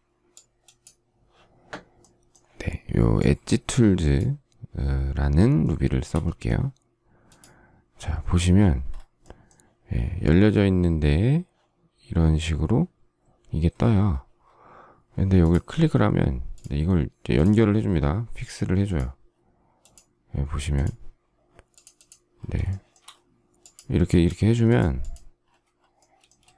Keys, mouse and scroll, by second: 5.3 shift+middle click, 22.3 shift+middle click, 26.1 space.